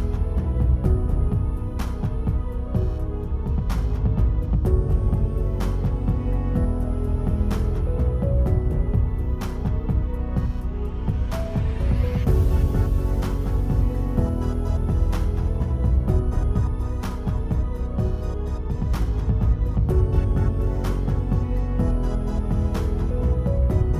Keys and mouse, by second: 0.2 alt+click, 0.7 click, 1.1 click, 1.6 alt+drag, 2.0 /, 2.6 s, 2.9 click, 3.1-3.4 alt+drag, 3.4 Tab, 3.5 Tab, 4.1 click, 4.8 click, 6.3 f, 6.6 click, 7.2 ctrl+z, 7.3 click, 7.5 click, 7.7 click, 8.0 click, 8.3 click, 8.9 click, 9.3 ctrl+z, 9.4 f, 9.8 click, 10.7 click, 11.3 click, 12.0 click, 12.7 click, 13.1 click, 13.4 f, 13.8 click, 14.4 alt+click, 14.5 click, 14.9 alt+click, 15.2 click, 15.5 click, 15.7 alt+click, 16.1 click, 16.4 alt+click, 16.9 click, 17.3 ctrl+z, 17.5 click, 18.0 alt+click, 18.5 click, 19.0 click, 19.9 click, 20.2 alt+click, 20.8 click, 20.9 click, 21.2 ctrl+z, 21.3 click, 21.5 ctrl+z, 21.6 click, 21.9 click, 22.5 click, 22.9 alt+click.